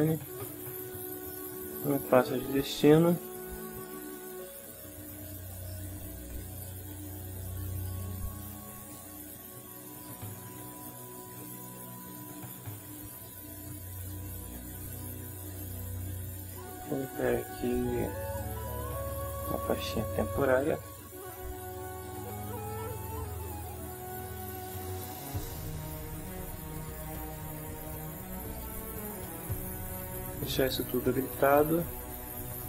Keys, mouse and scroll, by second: 0.3 click, 1.8 click, 7.7 click, 15.6 click, 18.3 click, 19.4 click, 20.1-21.1 typing, 23.7 click, 25.4 click, 26.7 click, 28.5 click.